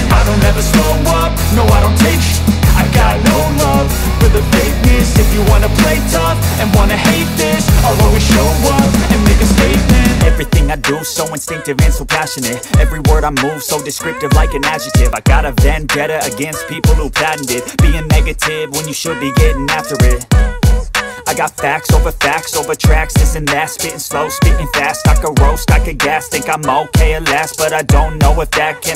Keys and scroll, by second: 1.7 x, 2.3 space, 3.3 x, 6.2 space, 13.1 ], 13.8 ], 15.1 [, 16.6 [, 17.5 [, 27.2 space, 28.0 space.